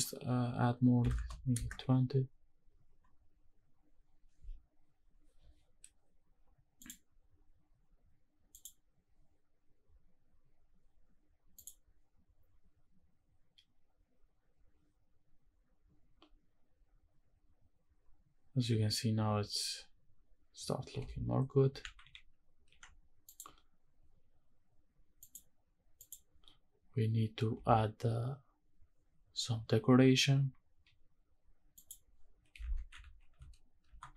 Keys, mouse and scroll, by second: 6.8-8.7 drag, 9.8 scroll up 1, 11.6 click, 20.9 shift+`, 25.2 shift+click, 25.9 shift+click, 31.9 click, 32.8 shift+`.